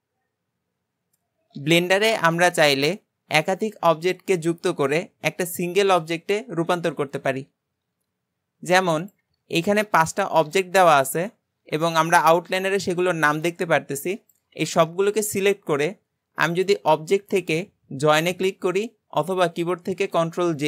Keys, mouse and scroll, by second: 0.2 click, 9.1 click, 9.6 shift+click, 10.5 shift+click, 11.0 shift+click, 16.5-19.7 drag.